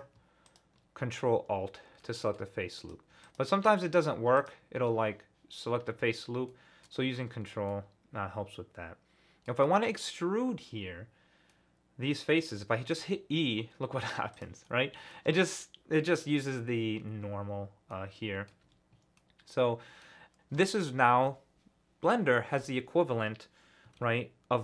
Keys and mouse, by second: 0.5 ctrl+alt+click, 2.0 click, 2.8 click, 3.2 shift+click, 6.5 middle click, 7.7-9.5 middle drag, 11.5 middle click, 12.9 e, 14.3 middle click, 14.6 middle click, 17.9 middle click, 18.0 middle click, 18.7 ctrl+z, 19.2 click.